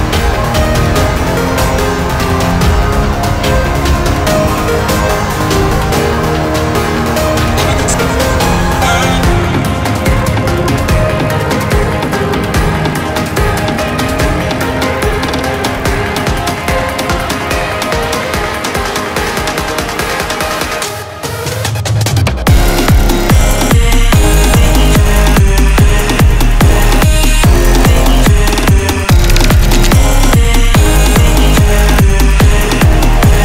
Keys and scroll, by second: 18.4 ctrl+z, 32.7 ctrl+z, 33.0 ctrl+z.